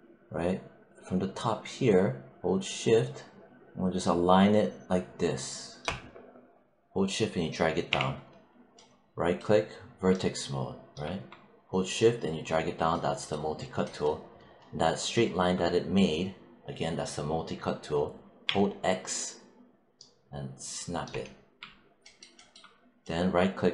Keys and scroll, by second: 7.8 w, 18.3 x.